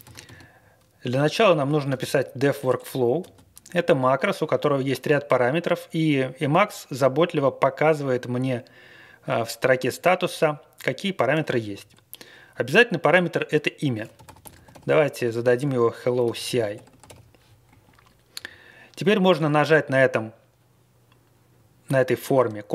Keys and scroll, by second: 0.0-3.2 typing, 2.7 Return, 13.9-17.5 typing, 17.7 Right, 18.3 Left, 19.3 ctrl+a.